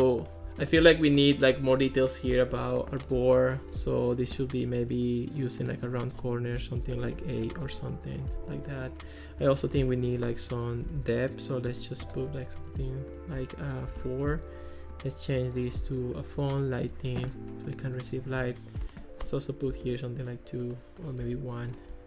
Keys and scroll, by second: 6.6 1, 6.9 BackSpace, 7.5 8, 7.7 Return, 10.9 1, 11.7 BackSpace, 12.1 8, 12.2 Return, 13.9 4, 14.0 Return, 19.7 2, 19.9 Return, 21.2 1.